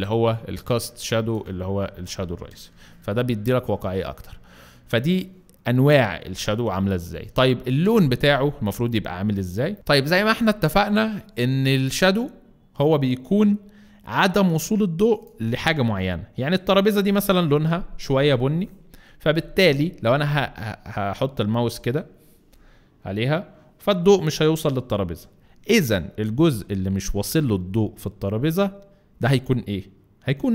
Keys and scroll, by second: 0.8 space, 8.6 Right, 8.7 Right, 9.5 Right.